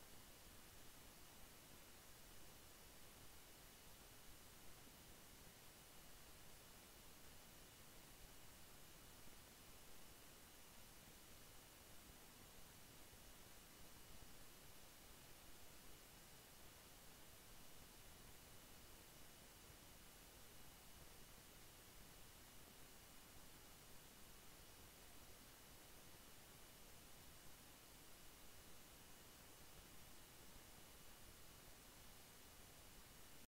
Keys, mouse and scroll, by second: 0.0 click, 1.2 Return, 4.2 click, 5.2 Return, 5.9 click, 14.3-14.6 scroll down 1, 15.7 click, 24.1-24.5 scroll up 1, 25.4 ctrl+d, 32.7 click.